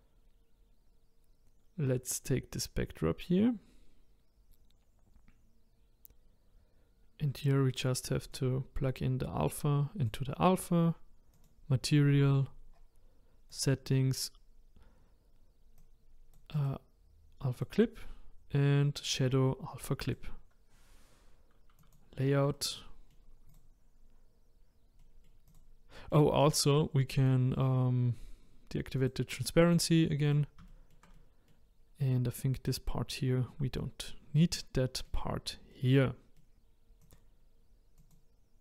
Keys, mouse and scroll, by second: 10.0-20.2 drag, 21.8 click, 22.5-25.5 middle drag, 25.5 click, 26.0-29.0 middle drag, 29.0 click, 29.7 middle click, 30.3 click, 30.7-38.1 shift+middle drag, 38.1-38.6 drag.